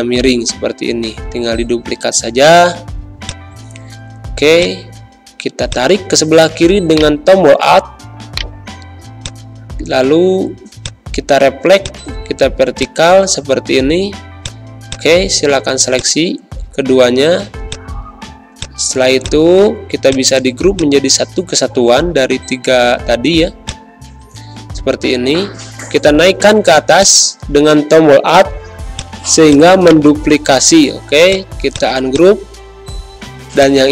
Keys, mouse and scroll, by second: 6.9 shift+right click, 9.2 shift+click, 12.4 shift+z, 12.7 shift+click, 13.1 shift+space, 13.3 shift+click, 13.7 shift+v, 14.3-18.5 shift+drag, 18.8 z, 19.1-20.7 drag, 20.9 space, 21.2 click, 21.8 Pause, 22.1 v, 23.6 shift+click, 24.8 ctrl+g, 26.9-28.9 alt+drag.